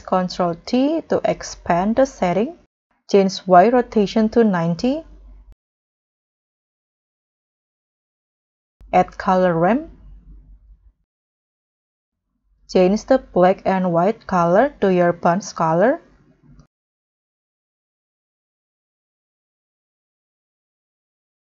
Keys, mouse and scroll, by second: 0.1 scroll up 1, 0.3 ctrl+t, 1.3 scroll up 1, 1.7 scroll down 5, 1.9-2.6 scroll up 9, 4.3-5.0 scroll down 3, 5.2 9, 5.3 0, 5.6 Return, 6.3-7.8 scroll down 7, 7.9 scroll down 1, 8.7 scroll up 2, 9.1-10.2 typing, 11.9-13.0 scroll up 10.